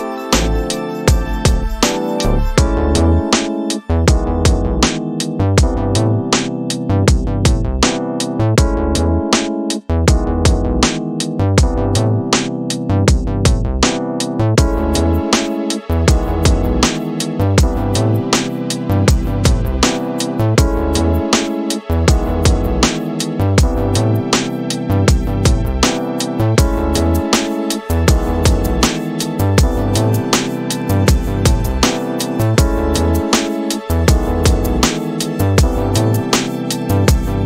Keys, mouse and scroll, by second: 1.0 space, 2.7 shift+Left, 9.4-10.6 drag, 15.2-16.4 drag, 18.5-23.8 drag, 25.4-26.6 middle drag, 28.4-30.7 drag, 31.5 middle click, 33.5-37.1 drag.